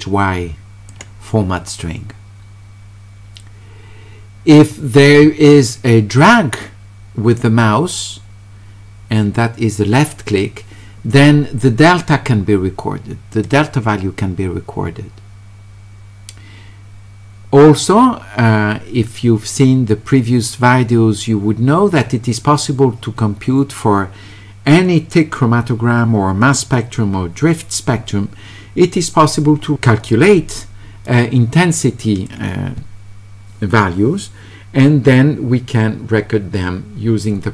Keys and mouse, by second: 13.4 click, 31.1-32.2 drag.